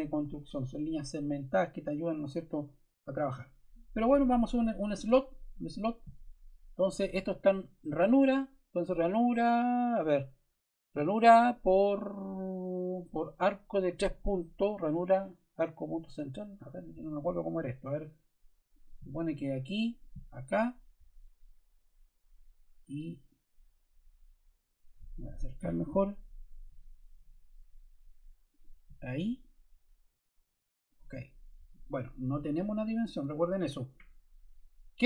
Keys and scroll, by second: 33.2 Escape.